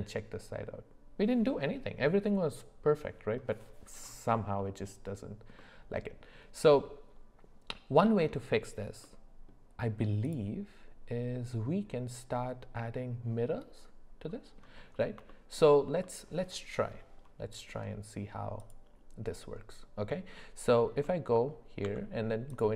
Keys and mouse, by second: 4.6 middle click, 5.6-8.1 middle drag, 9.0 middle click, 10.2 click, 15.3 shift+middle drag, 16.0 middle click, 21.8 Tab.